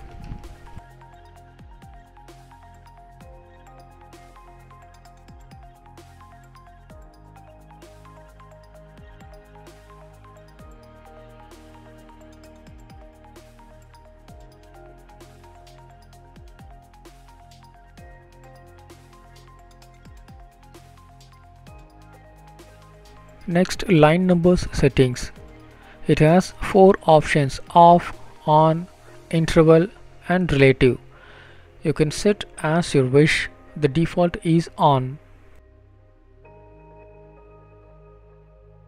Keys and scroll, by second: 3.9 Down, 4.5 Return, 21.3 Down, 27.6 Return, 31.0 Return, 31.5 ctrl+s.